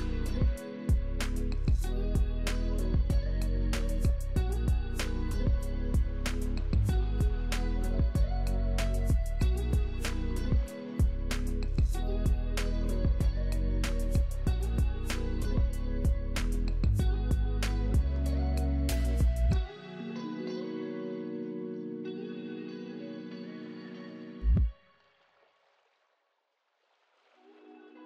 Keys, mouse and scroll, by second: 1.8 middle click, 4.6 middle click, 9.4 double click, 11.0 double click, 13.4 middle click, 13.4 middle click, 13.5 middle click, 16.5-19.5 scroll up 1.